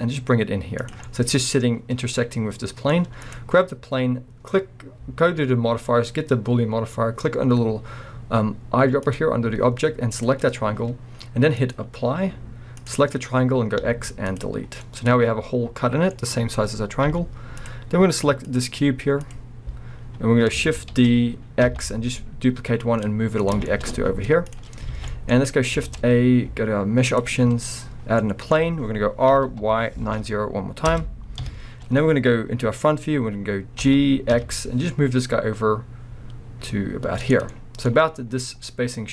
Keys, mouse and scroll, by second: 0.9 click, 1.1-3.2 middle drag, 1.4-2.1 scroll down 1, 3.2 click, 9.0 click, 11.6-12.9 drag, 13.9 x, 14.8-18.5 middle drag, 17.1 z, 18.5 click, 19.2 click, 20.0-20.9 scroll down 1, 20.9 shift+d, 23.5 click, 23.7-29.3 middle drag, 23.7 shift+d, 24.0 z, 24.9 alt+a, 25.5 scroll up 2, 25.8 shift+a, 29.3 r, 31.0 Return, 32.8-33.8 scroll, 33.8 g, 37.3 drag, 37.5-39.1 middle drag.